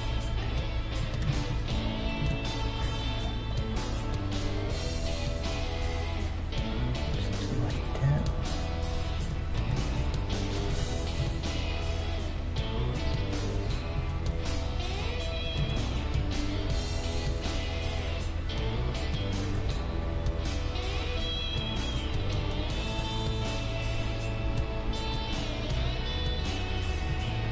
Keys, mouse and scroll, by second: 0.3 a, 1.3 z, 1.7-3.4 drag, 2.2 z, 2.8 g, 7.8-10.4 right drag, 9.3-12.0 drag, 9.7 z, 10.7 z, 11.2 g, 13.5-15.5 right drag, 14.1 z, 15.0-16.8 drag, 15.6 z, 16.2 g, 19.4-22.4 middle drag, 19.5 Tab, 23.2-25.1 middle drag, 25.1-25.8 scroll up 1, 25.8-27.3 middle drag, 25.8 KP_3.